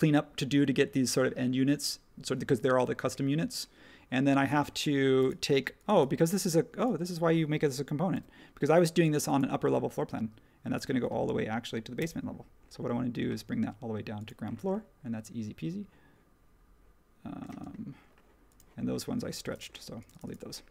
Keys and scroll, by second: 8.1 m, 17.5 space.